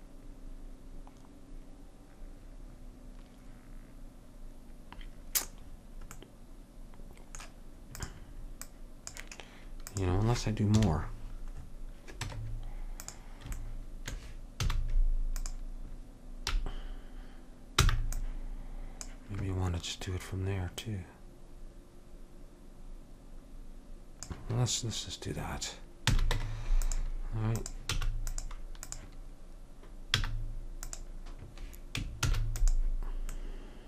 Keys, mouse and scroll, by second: 8.1-10.9 drag, 10.9 KP_1, 11.7 middle click, 12.4 Tab, 14.7 z, 18.0 b, 21.0-22.8 drag, 26.2 a, 26.5 Tab, 27.7-29.6 drag, 28.1 x, 30.3 z, 32.4 shift+d.